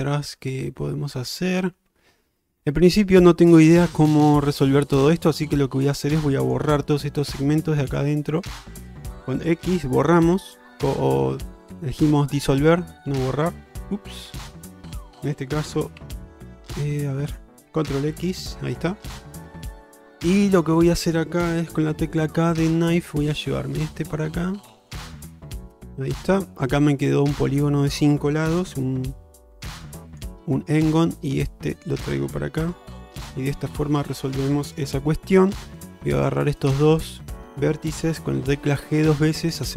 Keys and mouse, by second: 5.9 shift+click, 6.5 shift+click, 7.3 shift+click, 7.9 shift+click, 8.5 shift+click, 9.7 x, 14.6 ctrl+z, 16.1 z, 18.3 ctrl+x, 19.2-21.2 middle drag, 22.0 k, 26.3 middle click, 29.5 k, 33.5 middle click, 34.9 1, 37.3 middle click, 38.4 g.